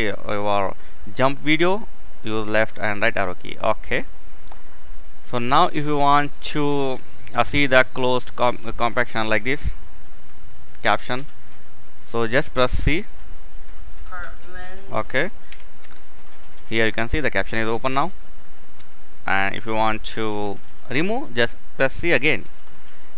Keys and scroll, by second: 10.8 c, 15.1 k, 15.5 c, 18.4 c, 22.1 c.